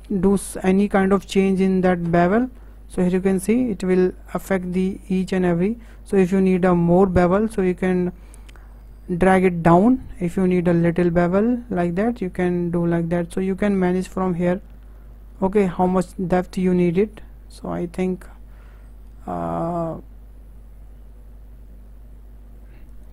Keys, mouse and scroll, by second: 0.0-3.2 shift+middle drag, 3.2 g.